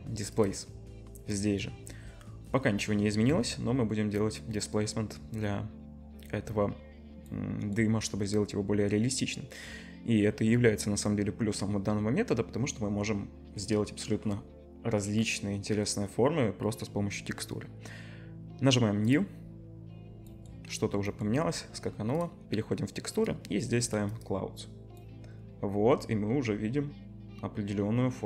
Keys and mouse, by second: 22.3 middle click, 23.3-28.2 drag.